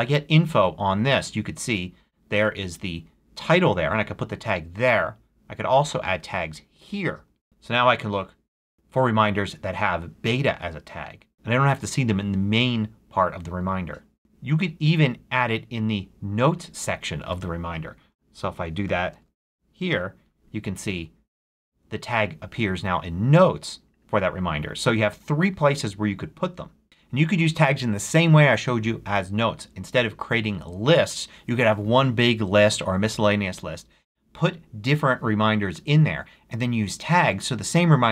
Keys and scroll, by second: 18.3-19.9 typing.